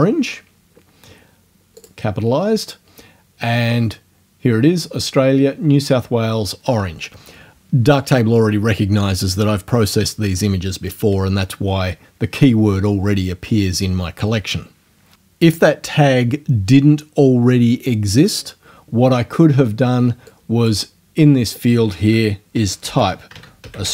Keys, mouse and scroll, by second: 0.0-0.3 typing, 1.8 click, 20.3 click, 22.3-23.9 typing.